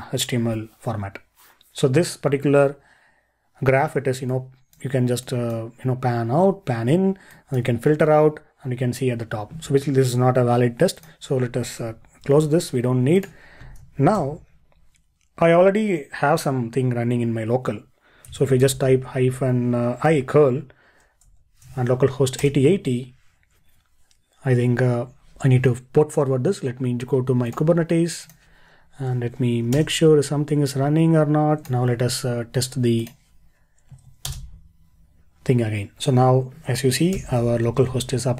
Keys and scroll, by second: 12.3 super+q, 14.2 ctrl+l, 37.1 ctrl+l.